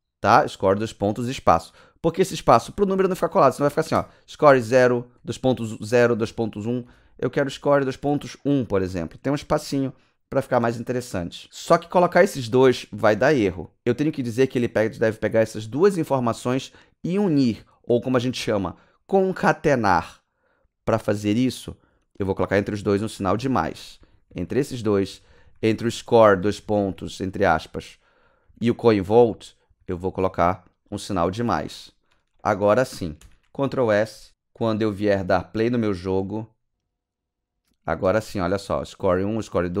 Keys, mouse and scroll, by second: 2.6 BackSpace, 3.9 KP_0, 5.5-8.0 typing, 9.4 BackSpace, 11.4 Right, 11.8 Left, 21.2 space, 23.2 Left, 23.4 Left, 24.0 Right, 24.3 Right, 24.5 Right, 25.1 Left, 25.3 Left, 25.4 Left, 25.6 Left, 25.8 Left, 25.9 Left, 26.4 Right, 26.6 Right, 26.8 Right, 27.0 Right, 27.5 Right, 27.7 Right, 28.4 Right, 28.9 Left, 29.2 Left, 29.3 Left, 29.7 Right, 29.9 Right, 32.3 ctrl+Right, 33.2 ctrl+s, 35.7 click, 36.7 click, 37.6 click, 37.7 w, 39.4 a.